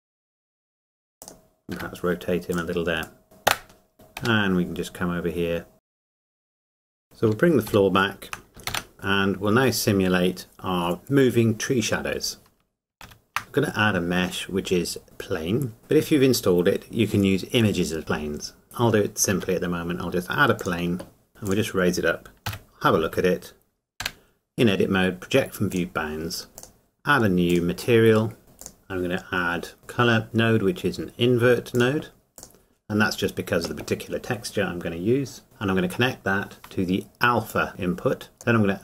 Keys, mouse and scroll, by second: 1.2 click, 1.7 r, 2.5 click, 3.2 middle click, 3.5 KP_0, 3.9 click, 4.2 g, 5.7 click, 5.8 middle click, 5.8 click, 5.9 scroll up 1, 6.0 click, 6.4 click, 6.8 click, 7.0 scroll down 1, 8.6 shift+h, 8.9 scroll down 1, 12.9 scroll up 1, 13.3 shift+a, 18.6 click, 19.3 s, 20.6 click, 20.6 click, 21.3 g, 21.4 click, 23.0 Tab, 25.7 click, 26.5 Tab, 28.1 click, 28.6 click, 31.7 click, 32.8-34.9 scroll down 1, 35.4 click, 37.5 click.